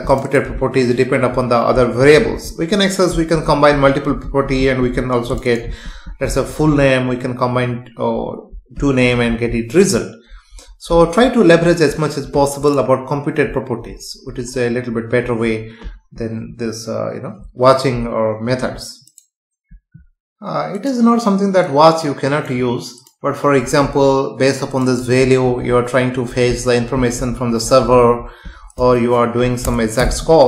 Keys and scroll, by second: 29.6 Return.